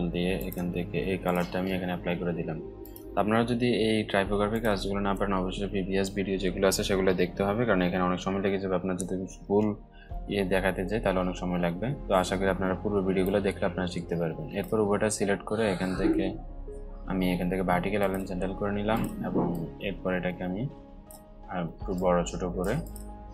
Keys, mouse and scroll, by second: 10.2-10.6 alt+scroll up 2, 10.6-11.3 alt+scroll down 2, 11.3-12.2 scroll up 2, 12.2-12.8 scroll up 1, 12.8-14.3 alt+drag, 14.3-16.2 alt+drag, 17.5-20.6 drag, 21.5-22.7 alt+shift+drag.